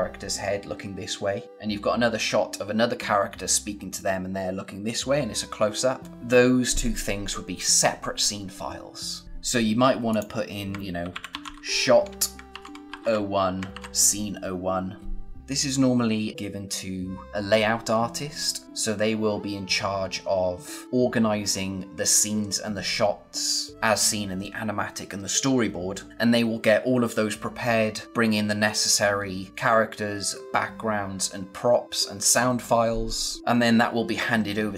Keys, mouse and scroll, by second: 10.0 click, 10.7-13.7 typing.